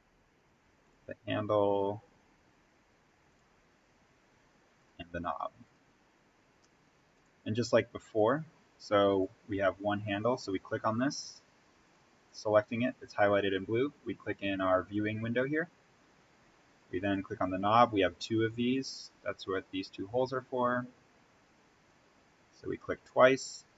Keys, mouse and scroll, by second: 11.8 click, 15.1 click, 20.6 click.